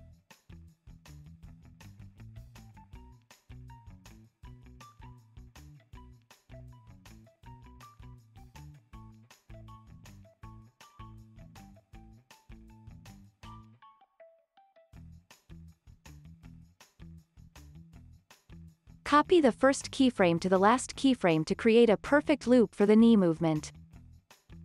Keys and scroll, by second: 0.6 alt+x, 2.8 alt+z, 3.2 alt+x, 5.4 alt+z, 5.9 alt+x, 7.4 super+Left, 7.7 super+Up, 8.9 super+Left, 9.3 alt+x, 10.0 super+Up, 10.5 super+Left, 11.3 alt+x, 12.3 super+Left, 13.8 super+Up, 14.7 alt+x, 15.8 alt+x, 16.6 alt+z, 17.2 super+Left, 17.7 super+Up, 18.3 alt+x, 21.4 super+c, 21.6 super+v, 22.5 alt+z, 22.9 alt+x, 23.3 space.